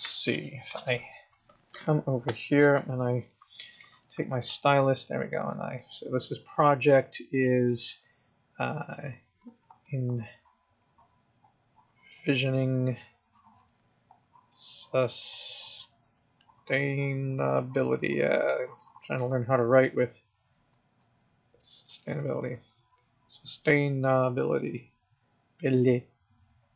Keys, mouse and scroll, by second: 4.9-7.5 scroll up 1, 7.5 click, 8.9 click, 9.4 click, 9.7 click, 9.9 click, 10.1 click, 10.4 click, 11.1 click, 14.5 click, 21.0 click, 22.2 click.